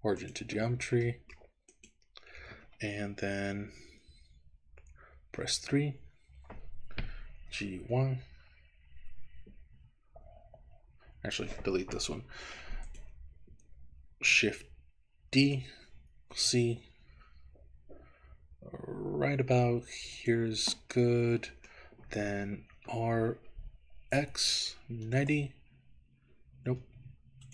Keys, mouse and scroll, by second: 1.1 middle click, 1.8 click, 5.2 KP_3, 7.4 g, 7.9 y, 10.6 Escape, 12.0 Delete, 13.0 click, 15.3 shift+d, 16.4 z, 20.2 click, 21.0 middle click, 22.8 r, 24.1 x, 25.1 KP_9, 25.3 KP_0, 26.7 BackSpace, 27.0 BackSpace.